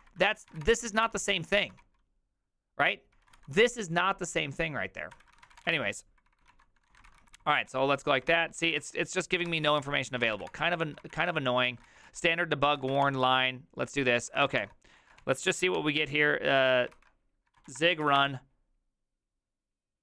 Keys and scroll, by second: 0.0-1.8 typing, 1.6 ctrl+c, 2.9-3.8 typing, 4.9-15.2 typing, 8.2 ctrl+c, 9.4 ctrl+c, 14.3 ctrl+c, 14.6 Return, 15.0 ctrl+a, 15.4 ctrl+c, 15.8 Up, 16.6 Up, 16.9 ctrl+c, 17.2-18.6 typing.